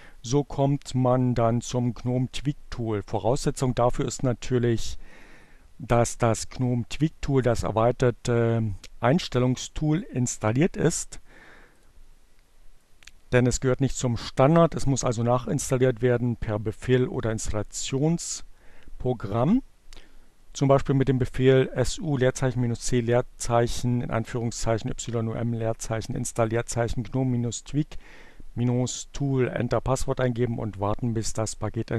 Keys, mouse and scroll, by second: 3.4-5.6 drag, 11.0 click, 12.7 click.